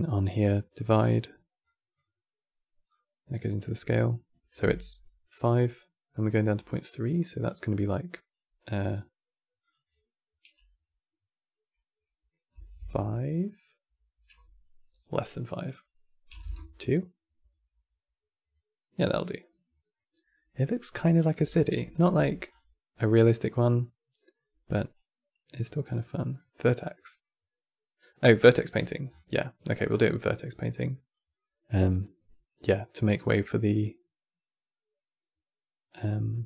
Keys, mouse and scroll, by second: 2.6 drag, 9.3-12.4 drag, 15.4-18.2 drag, 18.2 scroll down 2, 18.7-20.9 middle drag, 20.9 click, 21.2-21.6 alt+drag, 21.6-22.6 scroll down 8, 22.0 x, 24.6 click, 28.1 middle click, 28.5-29.1 scroll down 10, 29.1 middle click, 29.6 scroll down 8, 29.8-35.7 middle drag.